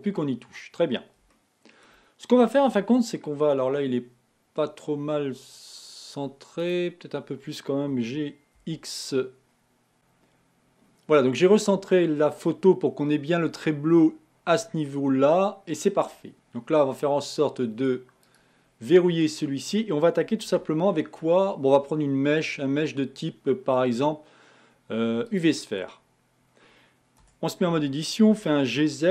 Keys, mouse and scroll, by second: 1.5 shift+middle click, 2.1 shift+scroll up 1, 6.8 click, 18.6 click, 20.7 shift+a.